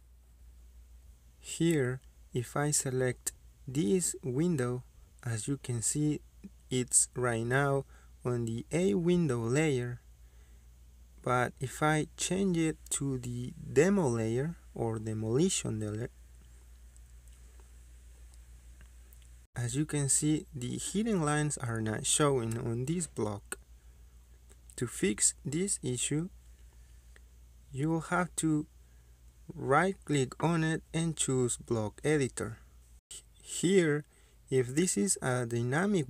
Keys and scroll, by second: 13.1 Escape, 14.3 Escape, 16.0-16.3 typing, 24.0 Escape, 27.5 Escape, 33.1 Escape.